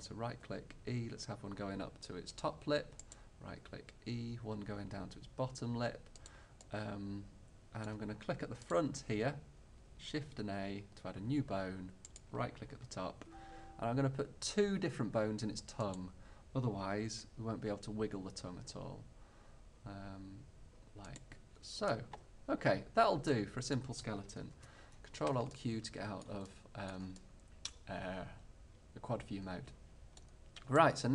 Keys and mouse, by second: 0.2-1.2 drag, 0.5 e, 2.5-5.0 drag, 3.1-4.3 right drag, 3.5 e, 6.4-8.7 drag, 10.2 click, 10.2 shift+a, 12.2-13.4 drag, 13.2 g, 13.5 click, 13.7 click, 16.5-18.0 drag, 17.2 e, 21.4-23.1 drag, 23.1 middle click, 24.5 ctrl+alt+q.